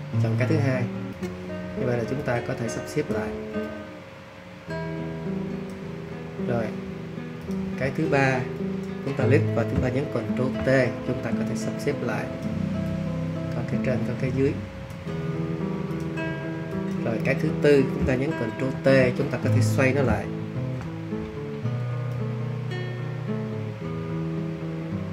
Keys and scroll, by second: 10.2 super+t, 18.7 super+y, 20.5 super+t.